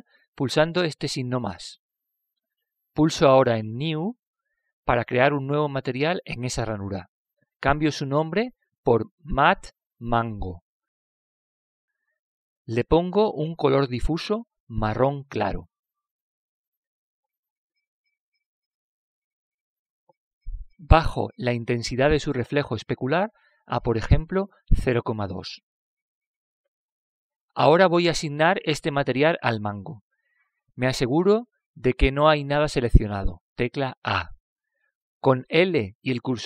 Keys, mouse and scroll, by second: 2.5-4.6 drag, 5.1-8.1 drag, 8.1 BackSpace, 8.5 BackSpace, 14.3-16.1 drag, 18.3-20.0 drag, 22.8-24.6 drag, 28.5-30.4 drag, 35.1 a.